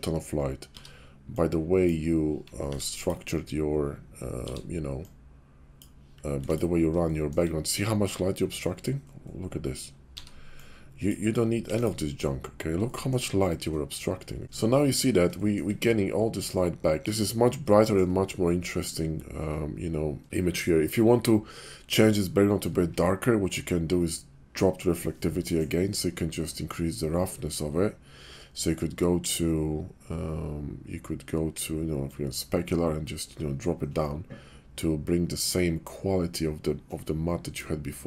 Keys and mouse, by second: 1.5 b, 2.6 x, 4.3 b, 6.2 x, 7.0 shift+middle click, 10.1 b, 11.5 x, 14.4 ctrl+z, 14.4 shift+click, 15.4 shift+click, 17.8 shift+drag, 20.5-23.1 drag, 32.1-37.6 drag.